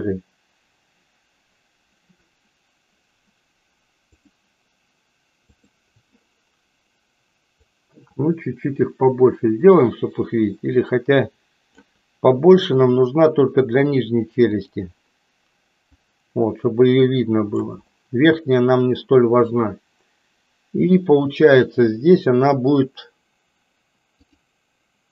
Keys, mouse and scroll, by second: 5.4 click, 7.6-13.1 drag, 14.6 click, 15.8-17.6 drag.